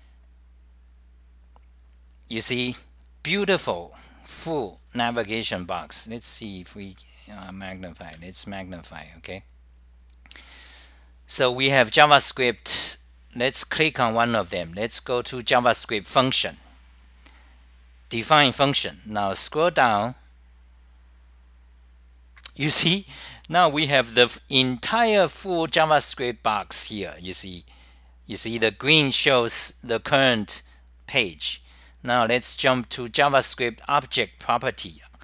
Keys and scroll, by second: 0.0 k, 4.2 k, 20.5 k, 25.6 k, 32.1 k.